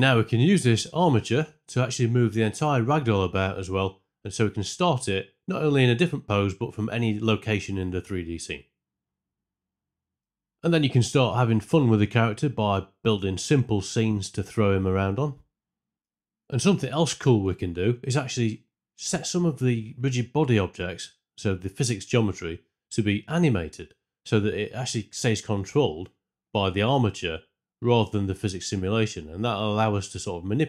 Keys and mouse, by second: 2.0-6.2 typing, 2.4 click, 3.3 shift+Left, 4.7 shift+Left, 6.3 shift+Left, 8.3 click, 8.3-12.6 typing, 8.7 click, 10.0 shift+Left, 10.1 alt+r, 10.2 alt+g, 10.4 Tab, 10.7 shift+middle click, 11.0 Tab, 11.0 ctrl+2, 11.2 click, 11.7 shift+Left, 11.8 ctrl+Tab, 12.0 click, 17.3 shift+Left, 20.7 click, 23.2 click, 24.9 space, 26.5 shift+middle click, 28.1 click, 28.5 r, 29.9 Escape.